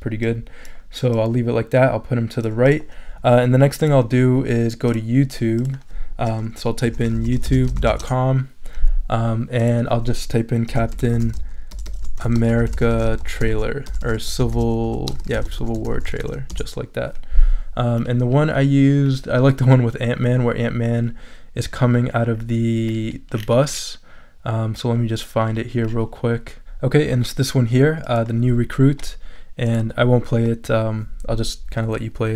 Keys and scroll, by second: 6.6-8.4 typing, 10.5-16.7 typing.